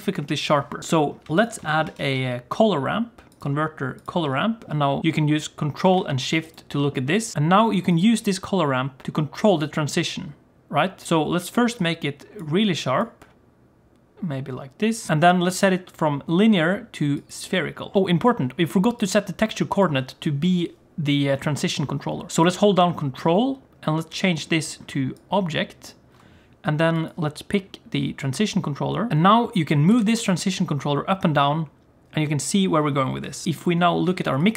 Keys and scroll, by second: 1.9 shift+a, 29.9 g, 33.4 d.